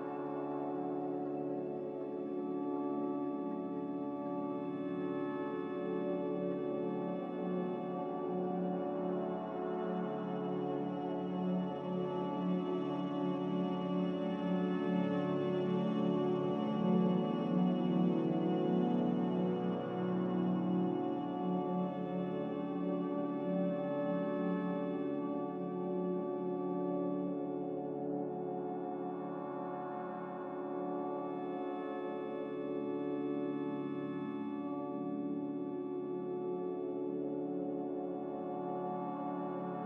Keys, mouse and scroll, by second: 2.8 z, 7.0 a, 20.5 z, 25.0 a.